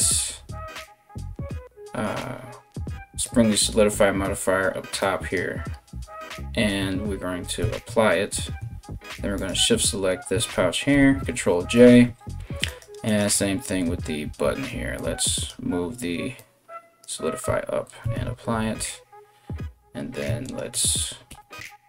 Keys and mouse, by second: 2.8 click, 3.3-4.6 middle drag, 4.6 click, 5.0-9.0 middle drag, 7.2 ctrl+a, 9.0 shift+right click, 9.1-20.0 shift+middle drag, 10.5 ctrl+j, 12.3 right click, 12.7 right click, 14.6-16.6 drag, 17.6 ctrl+a, 20.0 right click, 20.3-21.8 ctrl+middle drag, 21.3 ctrl+j.